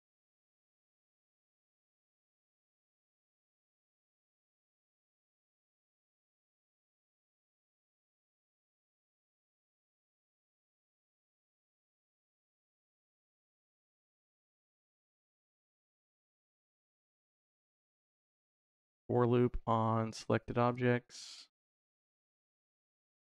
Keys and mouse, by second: 0.8 click, 1.8 click, 3.1 click, 4.3-6.4 drag, 6.9 click, 10.2 click, 10.9 middle click, 11.8 middle click, 13.7 click, 14.3 shift+a, 19.9-20.6 drag, 21.5 click, 22.8 middle click.